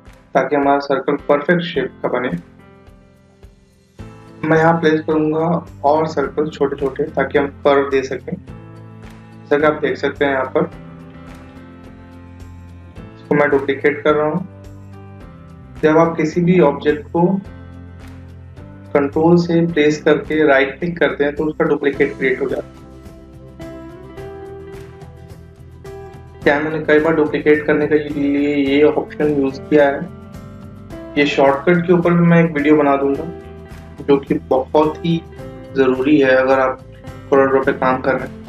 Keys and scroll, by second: 13.3 ctrl+d, 20.0 ctrl+Right.